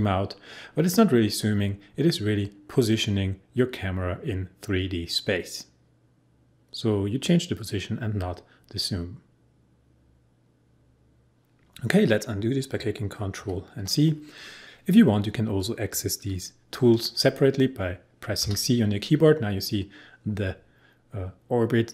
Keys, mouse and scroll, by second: 13.4 ctrl+z, 18.4 c.